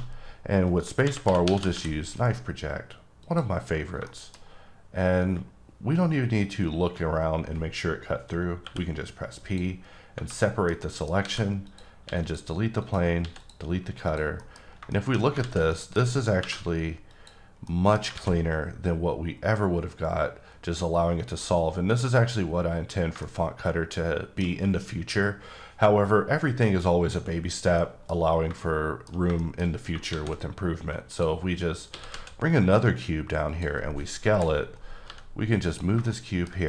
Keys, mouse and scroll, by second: 1.0-1.7 typing, 3.2 click, 4.0 shift+middle click, 4.4-6.2 scroll up 1, 9.3 click, 10.0 scroll down 2, 10.4 middle click, 10.8 double middle click, 11.2 alt+a, 11.7 click, 12.0 x, 12.2 click, 12.8 click, 13.2 x, 13.4 click, 14.1 click, 14.4 middle click, 14.6 scroll up 3, 14.9 middle click, 15.2 scroll down 2, 15.7 middle click, 16.4 alt+v, 17.1 click, 17.6 middle click, 18.1 alt+a, 23.2 shift+Num_Lock, 23.2 shift+middle click, 27.3 middle click, 27.4 scroll down 2, 27.8 middle click, 28.0 scroll down 1, 28.6 shift+middle click, 29.4 shift+double middle click, 29.7-30.1 scroll down 2, 30.1 shift+a, 31.1 click, 31.9 s, 32.1 z, 33.5 click, 34.2 KP_7, 35.0 g, 35.6 click, 36.1 shift+middle click, 36.6 scroll up 1.